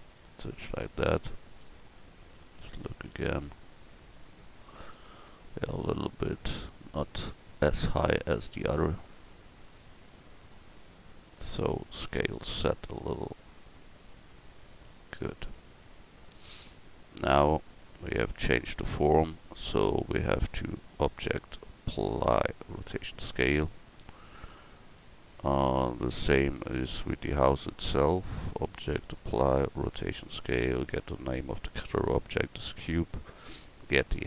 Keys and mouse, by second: 1.2 middle click, 2.1 middle click, 2.8 middle click, 3.9 middle click, 12.0 s, 15.8 Tab, 17.6-19.0 drag, 26.9-28.5 right drag.